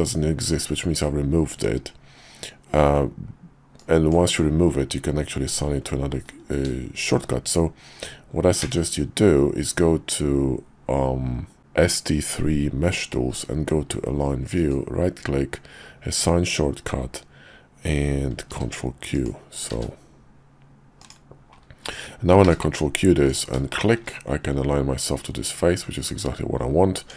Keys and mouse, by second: 8.6 q, 22.4 ctrl+q, 23.7 shift+middle click, 27.0 Tab.